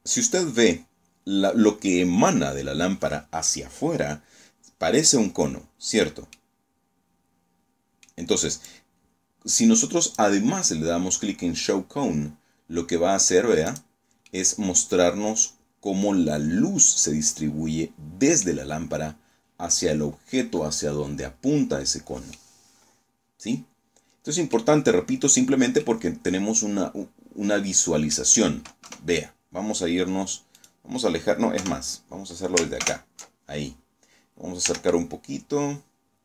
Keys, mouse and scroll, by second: 3.1 scroll down 2, 4.8-5.1 scroll up 2, 5.2-7.1 middle drag, 7.6-9.2 drag, 9.8 scroll down 2, 12.6 click, 13.2-17.4 middle drag, 17.4 scroll up 2, 18.6-19.0 scroll up 2, 19.4-19.7 scroll down 2, 20.6-21.0 scroll down 2, 21.2-23.6 middle drag, 23.8-24.1 scroll up 2, 24.3 scroll down 2, 24.7-27.2 drag, 27.8 KP_0, 28.7 scroll down 1, 29.4 right click, 30.5 KP_0, 31.7 ctrl+alt+KP_0, 33.6 g, 33.6 click, 35.4 click.